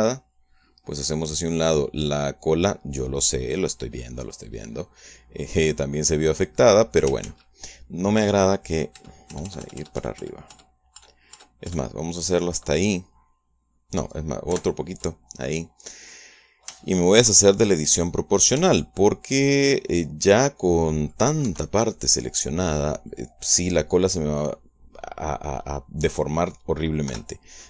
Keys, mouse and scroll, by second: 0.4-4.6 drag, 5.6 middle click, 6.4-8.1 middle drag, 8.1 ctrl+z, 9.8 ctrl+KP_Add, 15.4 ctrl+KP_Add, 17.0 middle click, 18.6 middle click, 19.4 c, 19.8 scroll down 2, 20.4-22.2 middle drag, 22.4 Escape, 22.6 scroll down 2, 22.8-24.2 middle drag.